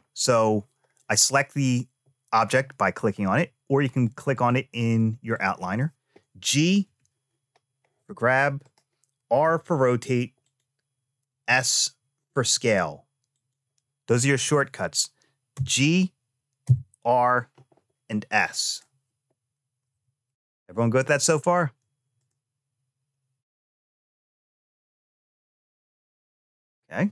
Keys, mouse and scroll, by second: 3.7 click, 4.6 click, 5.1 click, 6.6 g, 9.1 r, 11.1 s, 15.3 g, 19.8 ctrl+z, 22.0 click.